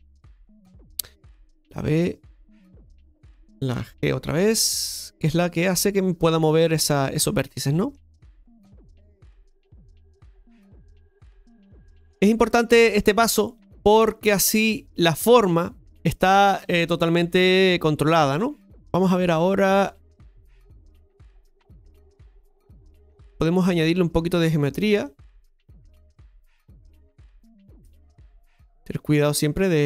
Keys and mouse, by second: 0.5-3.8 drag, 6.6-7.9 shift+middle drag, 10.1 click, 13.0 click, 15.4 shift+middle click, 16.3 click, 18.7 KP_7, 19.0 middle click, 26.7 right click, 27.5 click, 28.2 g.